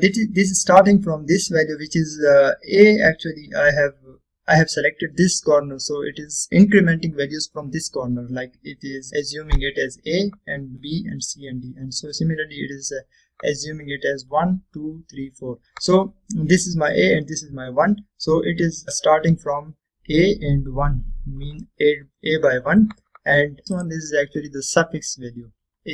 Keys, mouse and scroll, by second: 20.0 click, 23.6-24.9 scroll up 1, 24.9 click.